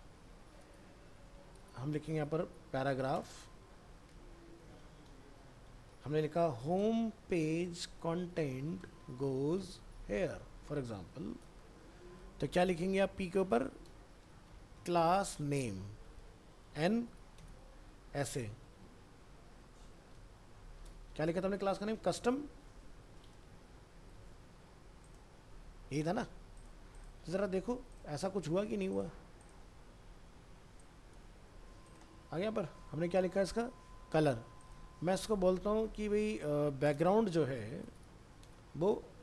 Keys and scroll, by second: 1.5 ctrl+z, 24.1 ctrl+s, 27.4 ctrl+s, 32.3 alt+Tab.